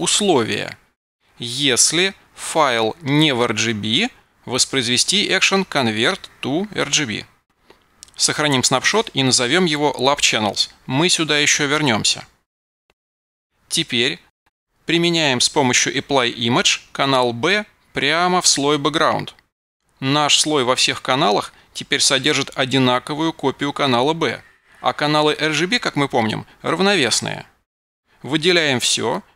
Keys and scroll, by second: 9.8 super+v, 29.2 super+a.